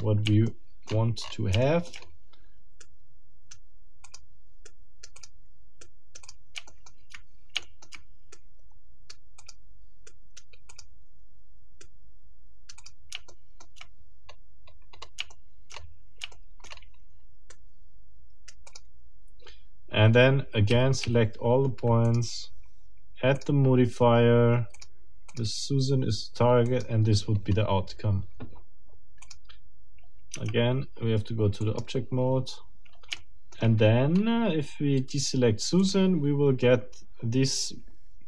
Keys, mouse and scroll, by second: 0.5 shift+middle click, 0.9 shift+scroll up 1, 1.6 shift+click, 2.0 shift+scroll up 1, 2.8 shift+right click, 4.0 click, 4.6 right click, 5.2 click, 5.8 right click, 6.2 click, 6.7 shift+middle click, 7.6 shift+middle click, 8.3-9.3 shift+right drag, 9.4 click, 10.1 right click, 10.7 click, 11.8-13.1 right drag, 12.8 click, 13.3 shift+right click, 14.3-15.2 shift+scroll down 8, 15.3 shift+middle click, 15.8-16.1 shift+scroll up 2, 16.3 shift+middle click, 16.7-17.2 shift+scroll up 2, 17.5-18.7 shift+right drag, 18.7 middle click, 20.8 a, 22.0 click, 23.4 click, 24.8 middle click, 25.3 middle click, 26.6 middle click, 27.4-27.7 scroll down 1, 29.2 middle click, 30.4 Tab, 31.6 middle click, 32.2-32.6 scroll down 2, 33.2 shift+middle click, 34.2 shift+scroll up 2, 35.8 middle click.